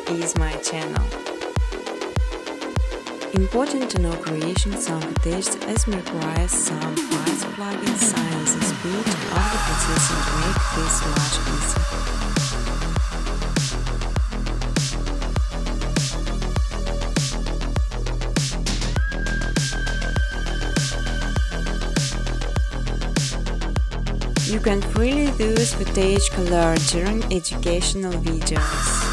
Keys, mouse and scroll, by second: 0.8 click, 1.0 click, 2.1 click, 2.5 right click, 3.7 click, 4.3-7.9 typing, 9.7 click, 10.0 click, 11.9 click, 14.5 click, 15.4 click, 16.9 click, 19.0 click, 19.8 click, 21.8 click, 23.3 click, 25.1 Tab, 25.5-28.7 typing, 27.4 Tab.